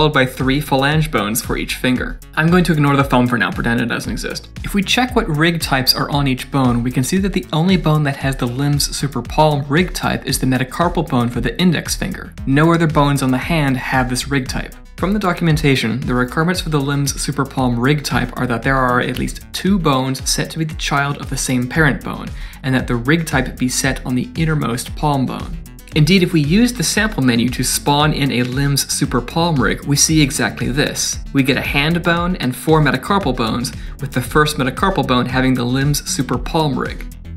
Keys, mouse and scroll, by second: 0.5 click, 2.4 click, 2.6 click, 4.5 middle click, 5.1 click, 7.6 click, 9.2 click, 10.1 click, 10.5 middle click, 11.6 click, 12.1 click, 13.5 click, 25.3 scroll up 4, 25.6-26.5 scroll down 8, 27.3-27.7 scroll down 2, 27.9 click, 28.9 click, 29.6 scroll down 1, 30.0 middle click, 30.5 KP_1, 32.2-33.2 scroll up 6, 32.4 middle click, 33.1 middle click, 33.6 g, 34.0 middle click, 34.3 shift+middle click, 34.6 middle click, 34.8 Tab, 35.5 scroll up 1, 35.9 click, 36.8 click.